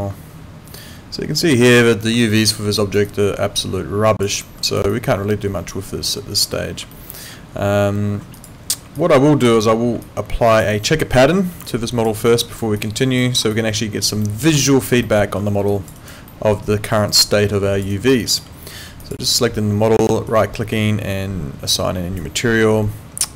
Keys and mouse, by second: 2.3 alt+middle click, 2.8 alt+right click, 3.1 alt+click, 4.4 alt+middle click, 4.7 alt+right click, 4.9 alt+click, 5.9 alt+middle click, 6.9 alt+middle click, 8.3 click, 9.0 alt+click, 10.0 alt+click, 10.7 alt+right click, 11.1 alt+middle click, 11.7 alt+click, 12.3 alt+middle click, 12.5 alt+right click, 12.8 alt+click, 13.2 alt+middle click, 13.5 alt+click, 14.3 alt+middle click, 14.7 alt+click, 15.1 alt+middle click, 15.7 alt+click, 16.0 alt+right click, 16.3 alt+middle click, 17.2 alt+click, 17.9 alt+right click, 18.2 alt+click, 20.3 right click.